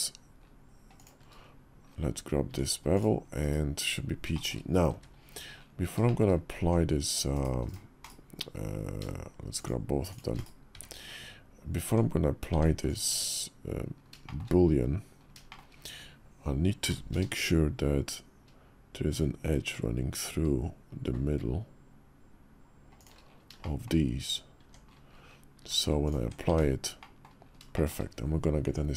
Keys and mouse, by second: 2.2 Tab, 3.2 /, 4.1 shift+middle drag, 4.7 `, 5.8 shift+middle drag, 6.4 Tab, 7.8 /, 9.3 shift+click, 9.8 shift+click, 10.1 /, 10.5 `, 11.6 Tab, 12.3 Tab, 12.8 Tab, 14.0 shift+middle click, 14.6 KP_5, 15.2 shift+middle click, 16.6 i, 23.4 shift+click, 24.4 Tab, 25.4 q, 26.2 Tab, 26.8 middle click, 27.5 shift+middle click.